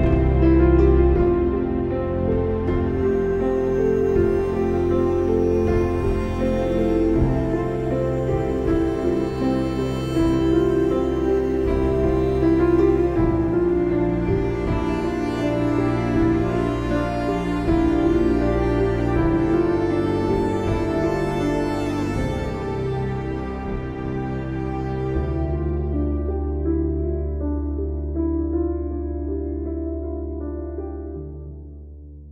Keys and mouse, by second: 2.1 click, 3.1 click, 4.1 click, 4.9 click, 5.7 click, 5.9 space, 6.2 click, 6.3 space, 6.6 click, 7.9 space, 8.0 click, 8.3 space, 9.3 click, 10.0 alt+click, 12.1 click, 13.1 click, 14.4 click, 15.0 click, 16.2 ctrl+-, 17.0 space, 17.1 click, 17.4 space, 17.5 click, 17.6 space, 18.1 click, 18.9 ctrl+-, 20.4 ctrl+-, 21.5 ctrl+-, 22.5 click, 24.0 ctrl+g, 25.0 ctrl+-, 26.5 alt+shift+click, 26.5 typing.